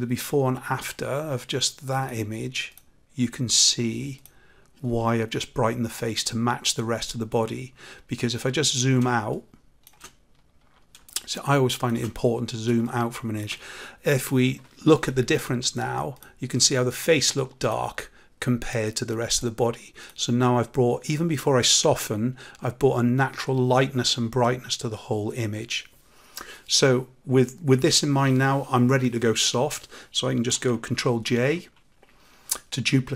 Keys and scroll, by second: 31.2 ctrl+j.